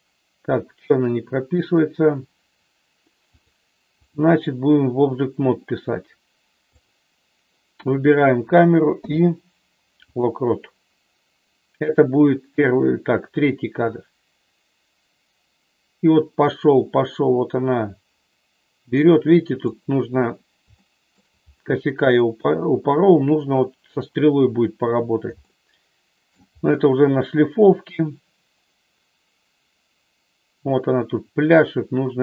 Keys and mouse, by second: 3.3-4.3 drag, 8.9 i, 13.5-19.8 drag, 20.8 shift+middle click, 25.5 shift+middle click, 28.1-32.2 drag.